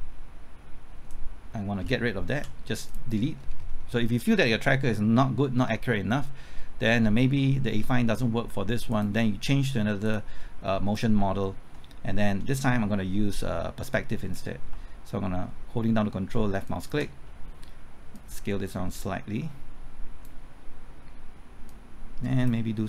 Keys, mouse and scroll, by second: 2.3 x, 2.8 click, 3.3 scroll up 1, 5.6 scroll down 1, 8.9 click, 16.6 ctrl+click, 18.1-22.7 drag.